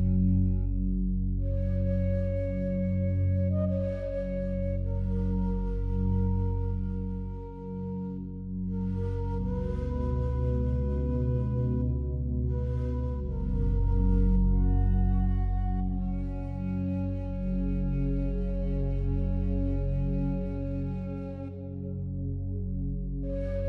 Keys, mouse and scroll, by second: 2.2-3.5 alt+drag, 3.5 Tab, 5.2 ctrl+r, 5.8-6.8 scroll up 1, 7.1 click, 7.4 right click, 8.5 Tab, 10.2 right click, 11.2 3, 12.3 shift+right click, 17.4-19.6 alt+drag, 19.6 shift+right click.